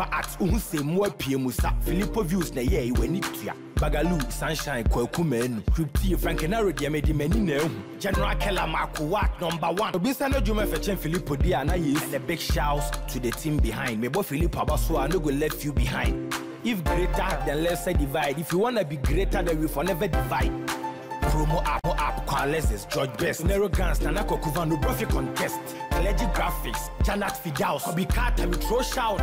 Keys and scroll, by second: 0.9 ctrl+t.